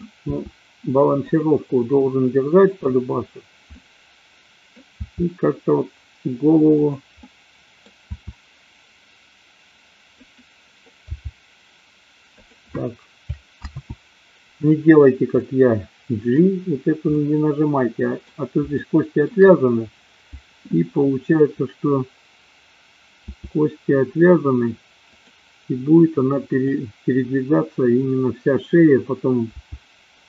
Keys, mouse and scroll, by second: 0.3 r, 2.7 click, 3.8 middle click, 5.1 r, 6.9 click, 7.3-7.8 middle drag, 8.2 r, 10.3 click, 11.2 g, 14.1 ctrl+z, 15.4-16.4 middle drag, 17.2-18.3 middle drag, 18.8-19.4 shift+middle drag, 23.3 r, 29.4 g.